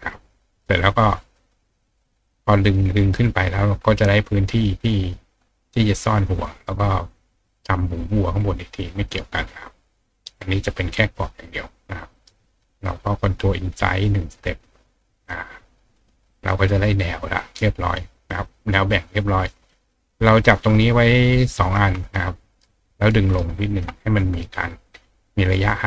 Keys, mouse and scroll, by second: 0.6 click, 12.8 click, 14.4 click, 16.0 click, 16.4 click, 20.3 click, 21.3 shift+click, 22.0-23.1 ctrl+drag, 23.3-25.8 ctrl+right drag.